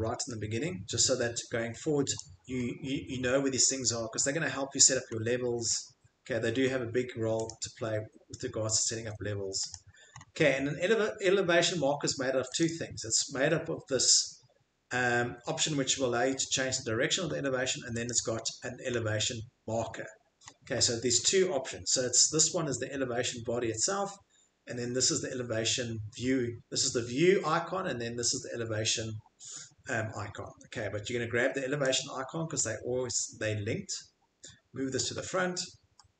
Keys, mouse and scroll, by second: 0.2 middle click, 2.1 click, 2.6 scroll, 3.1 scroll, 3.2 Escape, 3.9-4.4 scroll, 5.1 scroll, 5.7 scroll, 6.2-6.9 scroll, 7.4 click, 8.9 Escape, 9.7 click, 10.1 middle click, 10.1 click, 10.2 middle click, 10.3 middle click, 10.4 Escape, 12.7 click, 16.4 click, 17.3 Escape, 18.0 click, 20.4 middle click, 20.7 Escape, 20.7 scroll, 29.9 scroll, 30.2 Escape, 30.2 click, 30.5 Escape, 35.2 Escape.